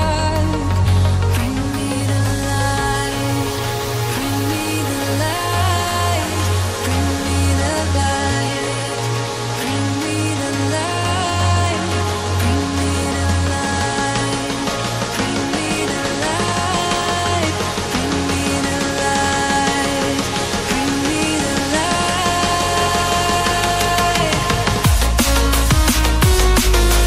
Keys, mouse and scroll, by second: 2.0-2.8 scroll up 1, 2.8 click, 6.8-7.9 scroll down 1, 7.9 scroll down 1, 7.9 click, 14.1 click, 17.7 click, 20.2 click, 23.8 click.